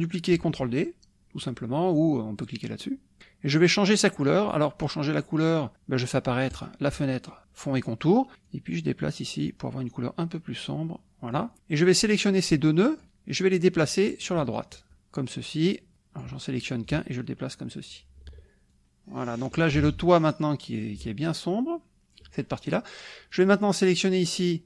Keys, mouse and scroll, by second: 6.5 click, 8.5-11.5 drag, 11.9-13.1 drag, 13.9-14.9 drag, 15.9 click, 16.9-18.1 ctrl+drag, 18.8 ctrl+click, 20.2 click, 21.0-22.3 ctrl+drag, 23.3 click.